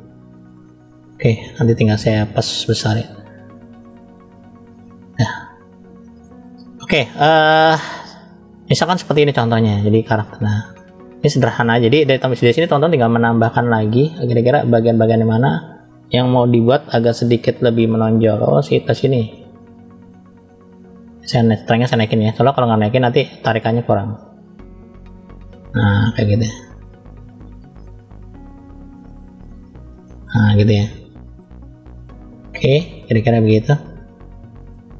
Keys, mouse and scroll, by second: 1.9 click, 2.7 click, 4.7 middle click, 7.3-8.5 scroll down 2, 8.5 middle click, 9.5 scroll up 1, 10.1 shift+middle click, 10.1 scroll up 1, 10.9 scroll up 1, 15.1-15.6 scroll down 1, 15.6-17.9 scroll down 1, 17.9 click, 18.6 click, 21.2 click, 22.0 click, 23.5 click, 25.5 click, 26.5 click, 26.9 click, 27.8 click, 28.4 click, 28.8 click, 29.2 click, 29.6 click, 30.0-31.3 middle drag, 32.4 middle click, 33.4 middle click, 34.4 middle click.